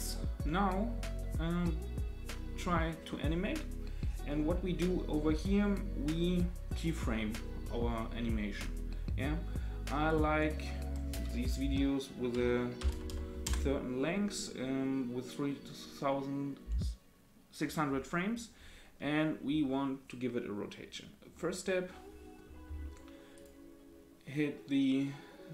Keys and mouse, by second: 10.2-14.0 drag, 13.1 KP_0, 23.3 click.